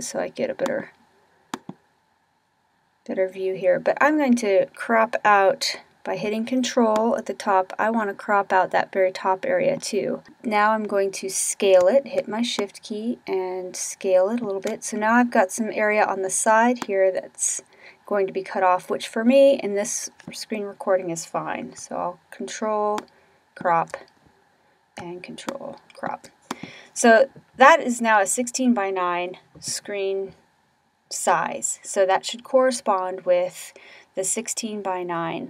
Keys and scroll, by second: 6.8 Up.